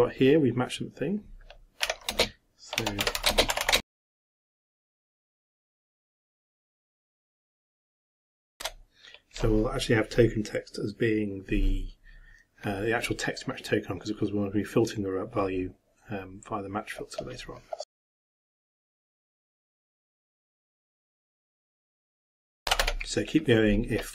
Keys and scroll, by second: 7.3-8.4 typing, 18.5-23.3 typing.